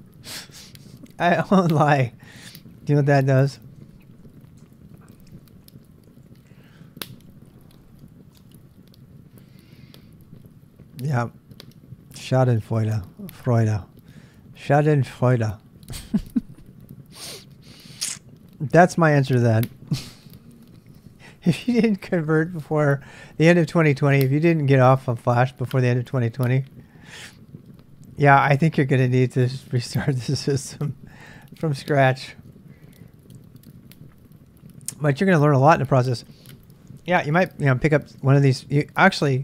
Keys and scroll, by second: 3.7 ctrl+[, 3.8-8.9 typing.